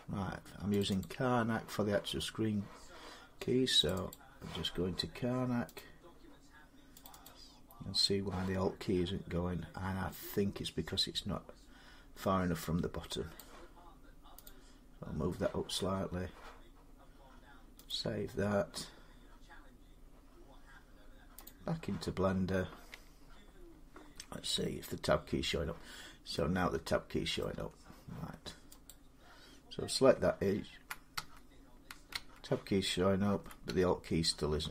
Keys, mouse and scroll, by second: 0.6 click, 0.8 click, 3.7 click, 3.9 click, 5.6 click, 7.6 click, 13.2 click, 14.3 click, 21.3 click, 24.4 Tab, 27.2 middle click, 27.3 Tab, 28.7 click.